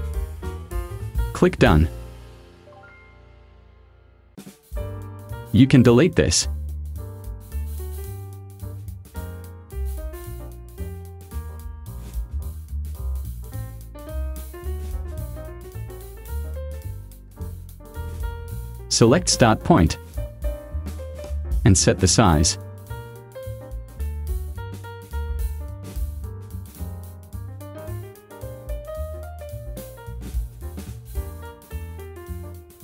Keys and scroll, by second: 6.1 Delete.